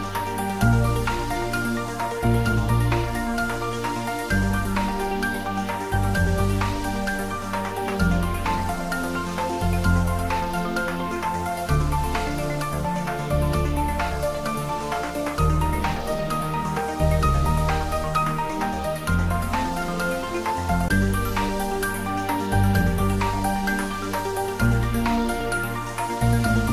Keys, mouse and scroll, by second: 0.3 shift+z, 1.1 scroll up 1, 2.9 click, 4.1 scroll down 1, 4.6-10.4 middle drag, 19.1 click, 20.0 scroll down 1, 21.2 click, 22.0 shift+z, 23.0-25.6 drag, 25.6 shift+d.